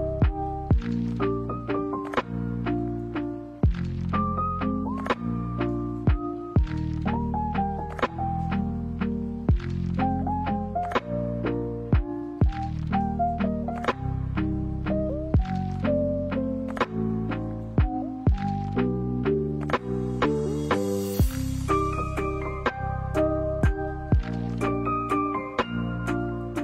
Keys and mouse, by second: 0.5 KP_1, 1.9 shift+middle click, 2.6 shift+middle click, 5.1 g, 6.9 right click, 7.1 g, 8.6 right click, 8.7 g, 10.6 right click, 10.7 g, 13.8 right click, 13.9 g, 15.4 e, 17.2 click, 17.9-18.7 middle drag, 18.8-19.2 middle drag, 19.9 a, 20.0 a, 20.2-21.6 middle drag, 21.7-22.1 middle drag, 22.6 right click, 23.4 w, 24.5 middle drag, 25.2 right click, 25.7-26.6 middle drag.